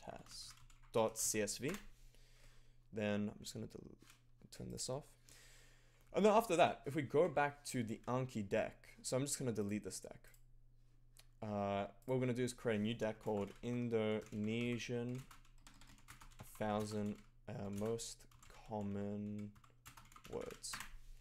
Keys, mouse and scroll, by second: 0.0-1.7 typing, 4.6-5.4 typing, 4.6 click.